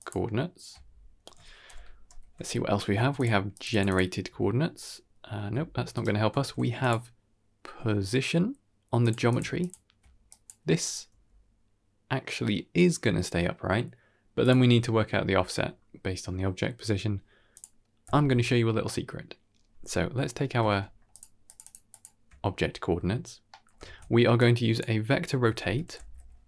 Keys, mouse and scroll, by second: 2.0 ctrl+h, 3.1 ctrl+shift+click, 3.4 ctrl+shift+click, 3.6 ctrl+shift+click, 5.3 r, 6.2 shift+a, 9.5 ctrl+shift+click, 10.1 click, 10.7 click, 11.0 g, 17.4 click, 18.0 typing, 20.6 shift+space, 21.0 ctrl+shift+click, 21.4 ctrl+shift+click, 21.5 ctrl+shift+click, 21.8 ctrl+shift+click, 23.4 middle click, 23.9 shift+a.